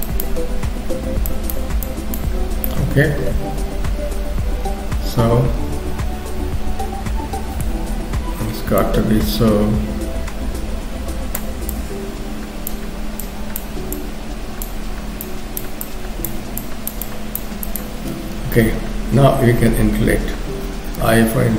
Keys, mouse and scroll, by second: 2.3-3.1 scroll down 2, 2.7 middle click, 8.0 KP_3, 8.4-8.9 scroll up 1, 8.9 click, 11.7 click, 14.0 click, 15.3 click, 16.7 click, 17.1 click.